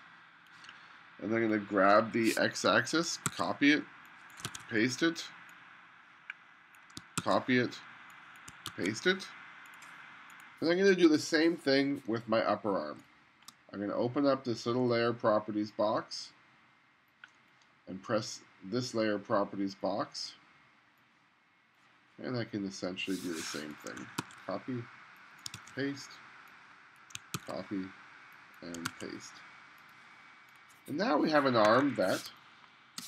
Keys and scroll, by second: 3.1 super+c, 4.5 super+v, 7.2 super+c, 8.5 super+v, 8.7 super+v, 13.1 space, 24.2 super+c, 25.6 super+v, 27.3 super+c, 28.9 super+v, 31.7 1, 32.3 space.